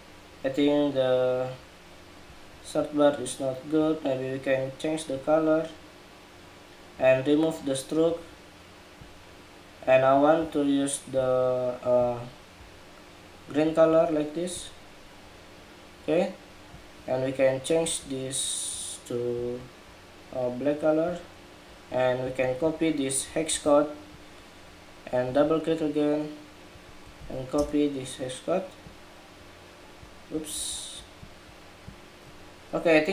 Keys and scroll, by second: 23.2 super+c, 26.9 super+v.